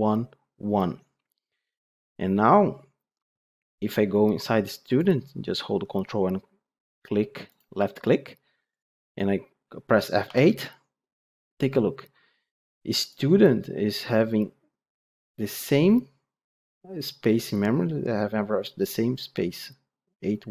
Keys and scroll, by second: 8.6 ctrl+F8, 10.2 F8.